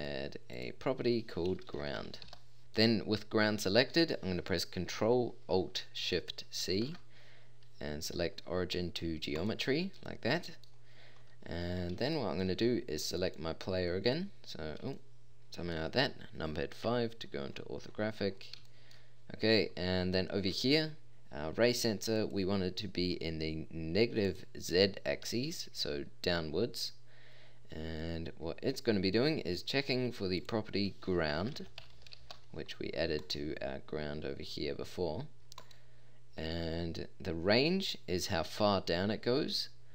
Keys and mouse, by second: 2.6-3.0 drag, 6.6 ctrl+alt+s, 16.9 KP_5, 38.5-39.5 middle drag.